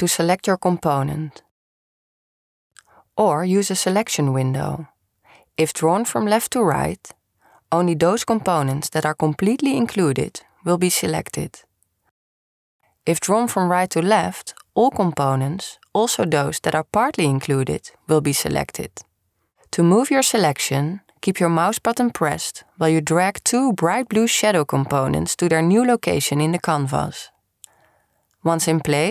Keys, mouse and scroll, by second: 1.5-2.8 drag, 4.1-9.2 drag, 12.3-16.1 drag, 22.3-29.1 drag.